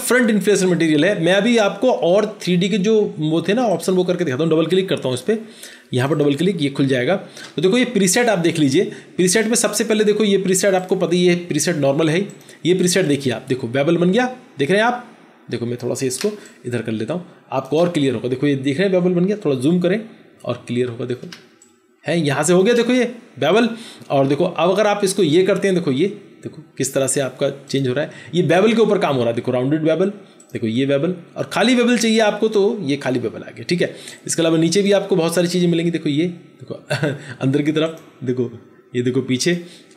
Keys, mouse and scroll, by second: 6.0 double click, 16.1 space, 19.8 ctrl+=, 20.4 ctrl+=, 21.2 space.